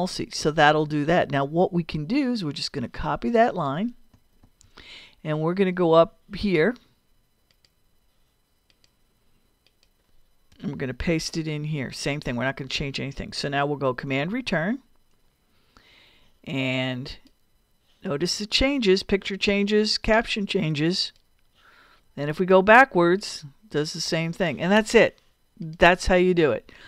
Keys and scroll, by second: 4.4 super+c, 10.5 Return, 11.2 super+v, 14.1 super+Return.